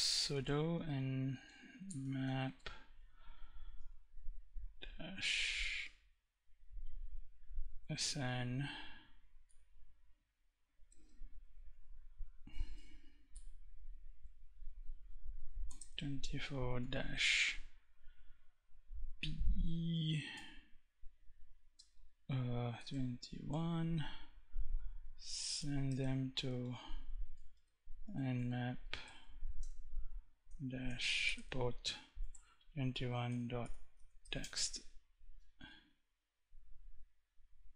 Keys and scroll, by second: 0.0-2.0 typing, 3.1 -, 4.2 -, 6.9-7.9 typing, 9.9 BackSpace, 10.2 space, 12.2 Right, 12.6 BackSpace, 15.0 4, 15.1 space, 16.1 -, 19.6 p, 21.1-22.8 typing, 24.9 shift+., 25.2 space, 25.9 shift+n, 27.1-34.0 typing, 36.9 Up.